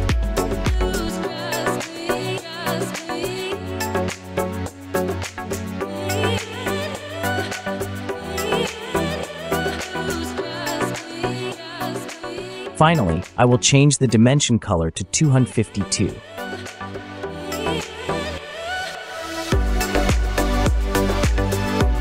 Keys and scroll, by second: 0.8 typing, 10.5 Escape, 12.2-12.8 typing, 16.3 Return.